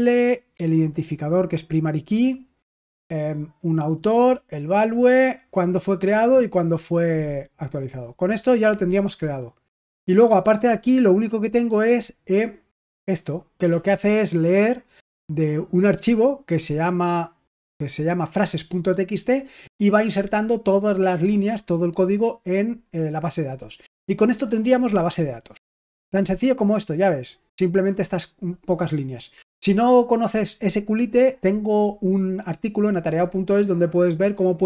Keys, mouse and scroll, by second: 0.4 typing, 2.9-4.7 typing, 5.9 j, 9.0 typing, 10.2-12.5 typing, 13.6 k.